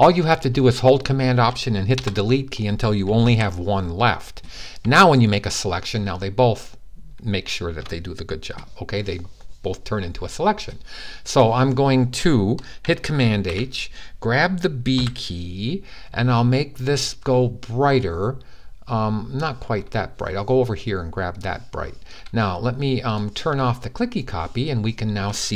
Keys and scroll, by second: 3.0 super+z, 13.1 super+h, 14.7 super+b, 17.6-18.4 typing.